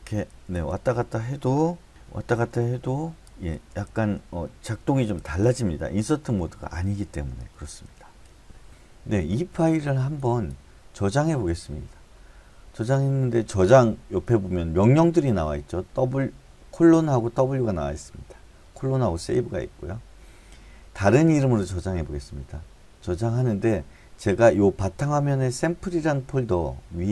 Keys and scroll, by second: 1.9 BackSpace, 2.5 Up, 2.5 Right, 2.8 Right, 3.0 Right, 3.2 Down, 3.5 Down, 6.3 Right, 6.5 Right, 6.7 Right, 6.9 Right, 7.1 Right, 7.4 Right, 7.6 Right, 7.8 Right.